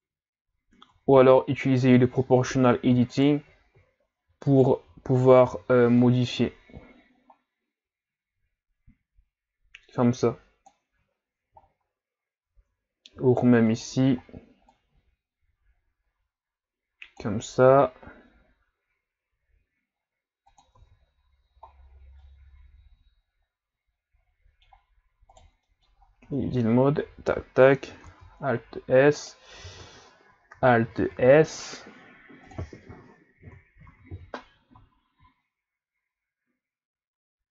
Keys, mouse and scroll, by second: 0.6-0.9 scroll up 1, 0.9 Tab, 1.6 alt+right click, 3.2 alt+right click, 4.5 alt+right click, 5.5 o, 6.0-11.2 drag, 11.2 ctrl+scroll down 1, 11.6-12.3 shift+scroll up 3, 12.3-12.6 ctrl+scroll down 1, 13.7 alt+right click, 14.7-17.7 drag, 17.7 r, 20.8 Tab, 21.7 scroll down 4, 22.2-25.2 middle drag, 25.4-25.7 right drag, 25.7 middle click, 26.0 scroll up 2, 26.3 Tab, 27.1 a, 27.2 a, 28.1 alt+s, 29.6 o, 32.5 click, 33.9 alt+s.